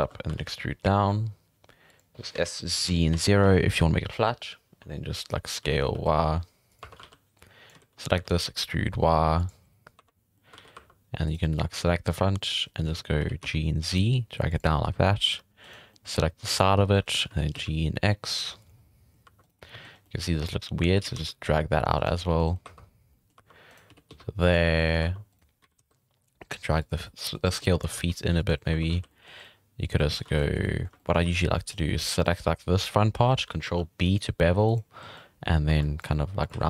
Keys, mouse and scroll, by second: 0.1 scroll up 1, 0.3 e, 2.3 s, 5.6 s, 6.8 1, 7.0 alt+a, 7.4-7.7 drag, 7.7 z, 8.0 shift+middle drag, 8.2 e, 10.0 1, 10.4 middle click, 10.6 alt+a, 10.7 2, 11.3 right click, 11.4-12.6 middle drag, 12.9 z, 13.2 g, 14.8 z, 15.0 scroll down 1, 15.2 2, 15.6 right click, 15.9-16.9 middle drag, 17.3 g, 18.8 scroll down 1, 18.8 middle click, 19.2 2, 19.4 right click, 19.6 middle click, 19.9 scroll up 1, 20.0 middle click, 20.9 g, 22.2 scroll down 1, 22.2 middle click, 22.6-25.6 typing, 23.1 middle click, 23.7 right click, 25.3 right click, 27.0 middle click, 27.6 ctrl+z, 27.8 s, 28.7 1, 28.9 alt+a, 29.0 scroll down 1, 29.1 middle click, 30.0 middle click, 30.3 alt+a, 30.4 middle click, 31.2 scroll up 1, 31.3 z, 31.5 middle click, 32.1 click, 33.7 ctrl+b, 35.7 1, 35.8 click, 36.0 g, 36.5 z.